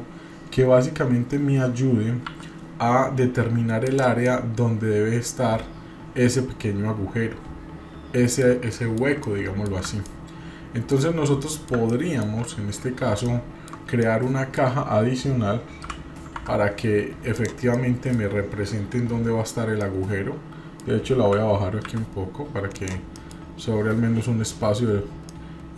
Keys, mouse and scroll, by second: 4.3-8.5 middle drag, 8.7 middle click, 9.2-9.7 middle drag, 9.9 scroll up 1, 10.0-11.1 middle drag, 11.1 scroll down 1, 11.4-11.7 middle drag, 11.9-12.2 middle drag, 13.2-13.7 shift+middle drag, 14.0 middle click, 15.8 g, 17.7 middle click, 18.4-18.8 scroll up 1, 19.5-19.8 scroll up 1, 19.8-20.9 middle drag, 21.2 g, 23.2 middle click, 23.4-23.7 scroll up 2, 25.0 scroll down 2, 25.3-25.7 middle drag.